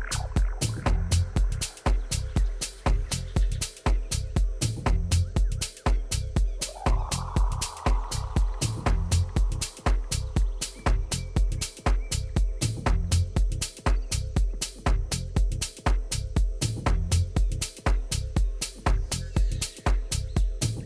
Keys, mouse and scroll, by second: 0.9 a, 1.3 middle click, 4.6 b, 6.2 click, 7.9 a, 8.8 b, 10.2-12.1 drag, 11.7 a, 12.3 b, 14.0-15.8 drag, 15.4 a, 16.6 b, 18.5-20.3 drag, 20.3 a.